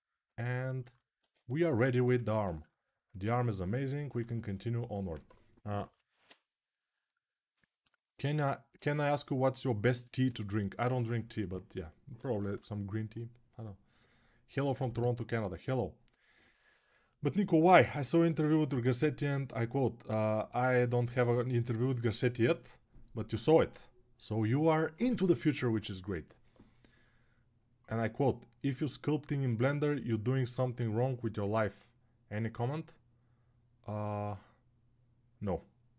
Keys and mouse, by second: 1.0 ctrl+Tab, 2.1 ctrl+r, 2.6-35.9 shift+right drag.